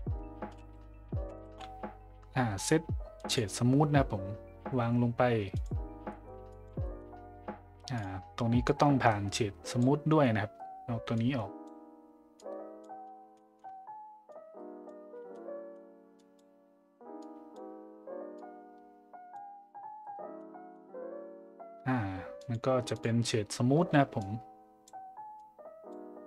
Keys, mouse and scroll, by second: 6.1 middle drag, 6.5 click, 6.8 middle click, 7.9 click, 8.7-9.8 drag, 11.1-11.6 drag, 12.4-12.8 drag, 13.4 middle click, 14.3-14.9 drag, 15.4 middle click, 16.2 click, 17.2-17.5 drag, 18.4 click, 20.4 middle click, 22.4 click, 22.9 click, 24.2-24.9 drag, 25.4 click.